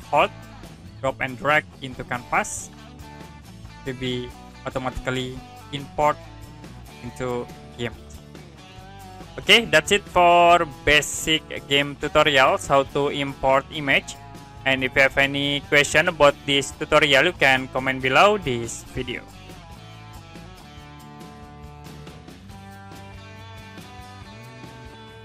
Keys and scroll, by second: 19.4 Print.